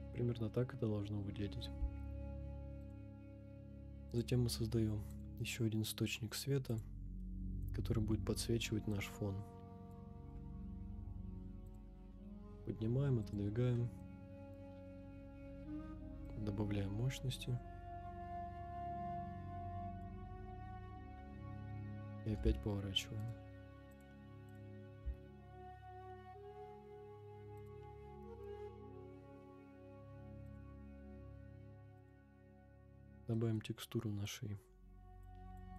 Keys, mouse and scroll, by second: 0.4-0.9 scroll down 2, 1.6-2.1 middle drag, 2.1 scroll down 1, 2.8 click, 4.1-4.6 drag, 7.2-7.7 middle drag, 7.6 scroll down 2, 8.9-10.0 drag, 8.9-10.0 scroll down 1, 10.2 g, 10.3 z, 11.8 click, 12.0 g, 13.3 click, 13.7 middle drag, 14.6 KP_0, 16.2-20.1 drag, 20.5-20.9 middle drag, 21.0 scroll down 2, 21.7 middle click, 21.7 scroll down 1, 22.3 r, 22.4 x, 23.2 right click, 23.9-24.8 drag, 25.0 r, 25.0 x, 27.7 click, 28.5 KP_0, 30.4 click, 31.5 scroll up 2, 32.0 click, 33.3 middle click, 34.2 click.